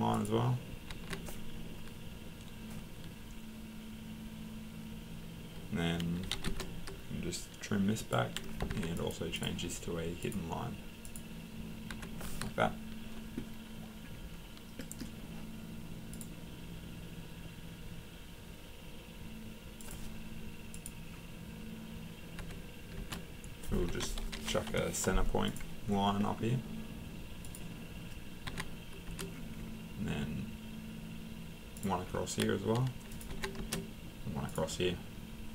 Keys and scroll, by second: 0.9 Escape, 6.0-6.8 typing, 8.7 Escape, 11.9 Escape, 22.4 Escape, 23.9 Escape, 24.3 typing, 24.7 Return, 28.5 Escape, 30.7 Escape, 33.3 Escape.